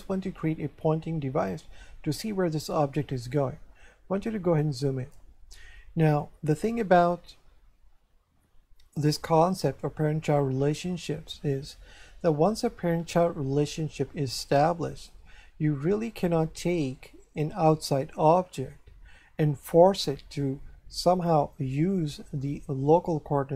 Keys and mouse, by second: 5.5 shift+middle click.